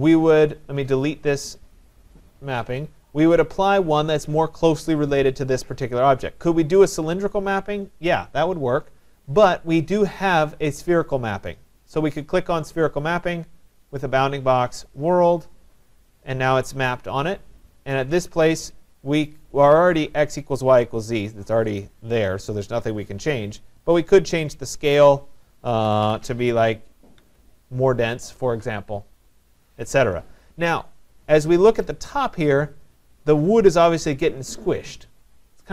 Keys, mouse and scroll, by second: 1.5 click, 4.4-6.5 drag, 12.5 click, 13.9 click, 15.0 click, 21.8 click, 24.0 click, 24.9 click, 25.6-26.5 typing, 27.2 Tab, 30.3 middle click, 30.5 middle click, 30.9 middle click, 31.0 middle click, 31.1 middle click, 31.8 right click, 32.2 middle click, 32.3 middle click, 32.4 middle click, 32.5 middle click.